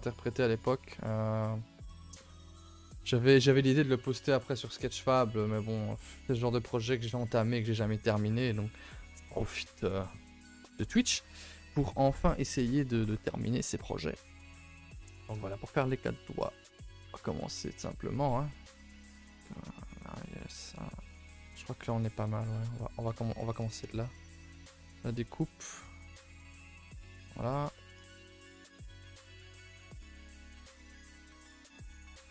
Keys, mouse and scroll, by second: 1.3-2.1 scroll down 2, 5.0-8.1 middle drag, 13.8 middle click, 14.2-14.9 scroll up 4, 14.5 shift+middle click, 14.9 a, 15.0 a, 15.1-16.1 middle drag, 16.1 3, 16.4 middle click, 16.6-17.8 scroll up 1, 17.8 middle click, 18.3 scroll down 1, 18.5-21.7 middle drag, 21.7 k, 21.8-24.5 middle drag, 24.5 k, 26.7 middle click, 27.6 scroll up 1, 27.7 middle click, 28.0 scroll down 1, 28.2 middle click, 28.7 scroll up 3, 29.1 middle click, 29.8-30.1 scroll up 1, 30.1 k.